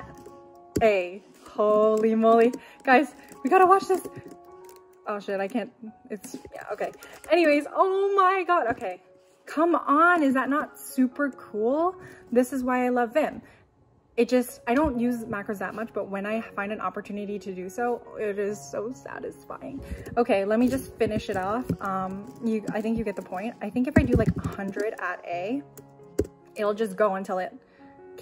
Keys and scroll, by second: 0.7 shift+a, 7.3 typing, 23.1 typing.